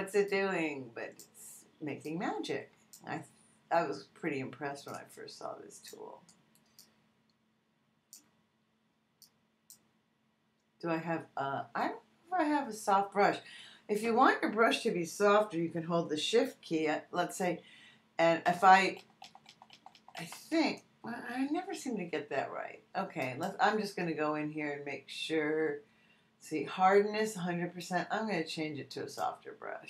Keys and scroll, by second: 18.4 shift+].